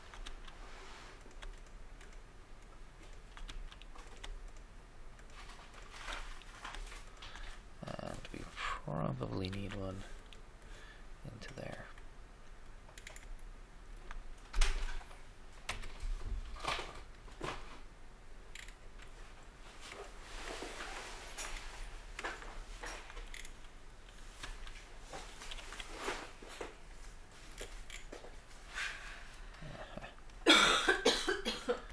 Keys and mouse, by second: 0.2 f, 0.4 f, 3.4 f, 3.5 f, 6.0 f, 6.2 f, 9.4 ctrl+r, 9.4 ctrl+r, 11.4 click, 11.9 middle click, 15.6 KP_Decimal, 15.6 ., 19.9-20.9 right drag, 21.5 shift+right click, 22.3-24.7 shift+drag, 24.3 f, 24.5 f, 25.5 ctrl+z, 25.5 ctrl+z, 26.8 middle click, 28.9 middle click, 29.1 middle click, 30.5-31.6 middle drag, 31.6-31.9 drag.